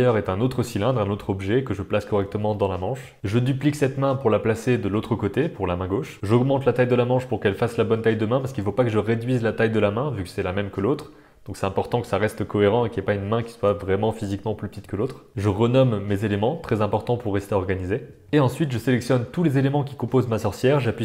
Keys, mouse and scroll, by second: 0.2 middle click, 0.8-2.8 typing, 1.8 middle click, 3.2 middle click, 4.2 shift+d, 4.7 shift+middle click, 4.9 middle click, 5.1 r, 6.2 Tab, 6.2 middle click, 6.5 click, 6.9 click, 7.2 s, 7.8 middle click, 8.3 Tab, 8.6 middle click, 9.3 middle click, 9.7 g, 10.0 click, 10.1 Tab, 10.2 middle click, 10.7 click, 11.7 click, 11.9 click, 13.8 shift+click, 14.0 shift+click, 14.2 click, 14.4 click, 14.5 alt+shift+click, 14.8 s, 15.0 middle click, 15.2 Tab, 15.3 click, 18.4-20.8 drag.